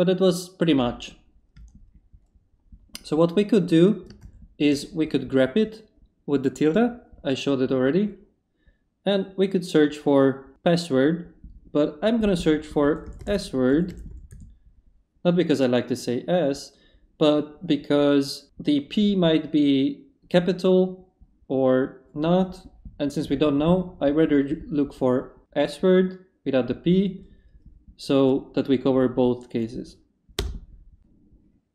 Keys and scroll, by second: 1.5 Up, 4.2 shift+`, 12.8 typing, 14.1-14.8 typing, 30.4 Return.